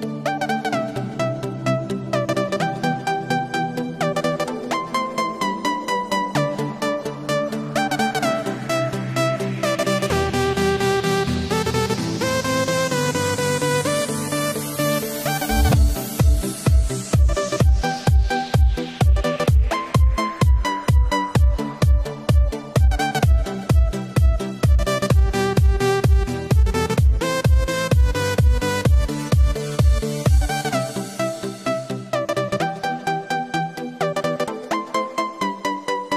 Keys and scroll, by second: 0.7 super+z, 1.2 super+z, 1.5 super+z, 1.8 super+z, 2.1 super+z, 2.4 super+z, 4.1 super+z, 5.0 super+z, 5.6 super+z, 6.4 super+z, 7.4 super+z, 7.9 super+z, 8.4 super+z, 10.0 super+z, 10.7 super+z, 11.1 super+z, 11.8 super+z, 12.4 super+z, 13.5 super+=, 13.7 super+=, 25.3 super+z, 32.0 super+-, 32.2 super+-, 32.4 super+-, 32.6 super+-.